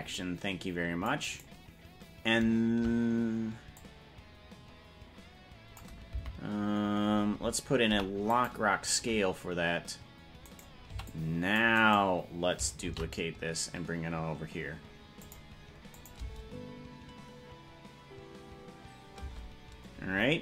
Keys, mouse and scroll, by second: 3.9-6.0 drag, 6.3 Right, 7.9 i, 10.5 right click, 10.9 c, 13.0 shift+d, 16.1-17.7 drag, 16.4 space, 19.4 space.